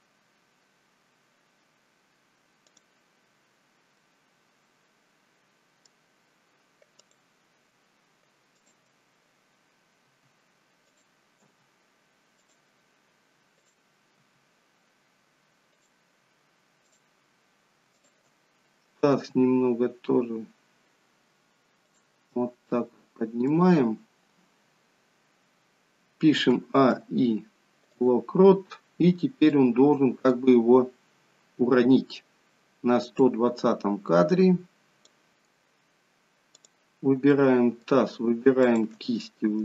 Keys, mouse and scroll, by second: 4.0 middle click, 6.9 click, 8.5 shift+click, 9.9 r, 11.4 g, 13.5 click, 14.3 g, 16.7 click, 17.9 shift+click, 19.1 g, 22.2 middle click, 26.4 a, 26.8 i, 29.4 middle click, 29.5 middle click, 33.2 click, 36.5 click, 37.4 middle click, 38.5 shift+click, 39.0 middle click.